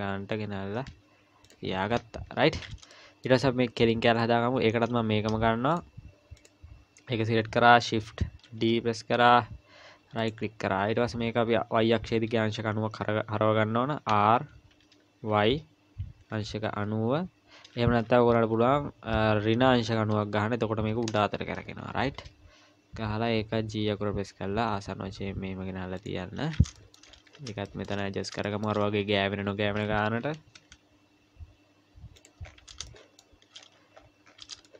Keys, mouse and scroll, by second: 0.8 g, 1.7-2.8 scroll down 11, 2.3 Tab, 2.9 shift+middle click, 5.7 click, 6.4 click, 8.4 shift+d, 14.1 r, 23.1 g, 26.8 shift+middle click, 27.1-28.3 scroll up 10, 27.7 shift+middle click, 28.5 shift+middle click, 28.8 scroll up 2, 29.8-30.2 scroll up 1, 30.2 g, 32.8 scroll up 4, 32.9 shift+middle click, 33.6-34.6 scroll up 13, 34.6 shift+middle click.